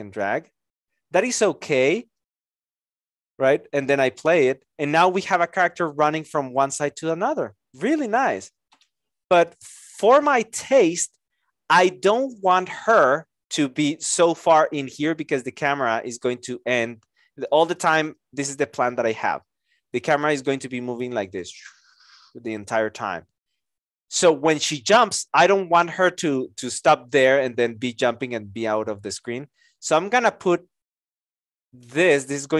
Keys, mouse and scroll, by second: 18.4 alt+click.